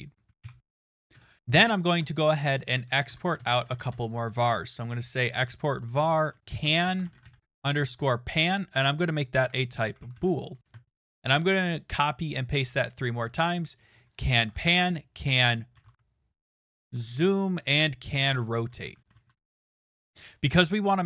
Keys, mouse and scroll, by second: 0.0-0.9 typing, 1.1 Return, 2.8-4.2 typing, 3.0 Tab, 5.8-10.6 typing, 10.8 ctrl+c, 11.0 ctrl+v, 11.1 ctrl+v, 12.6 click, 12.7 click, 13.3 click, 13.8 click, 14.2-21.0 typing, 17.7 right click.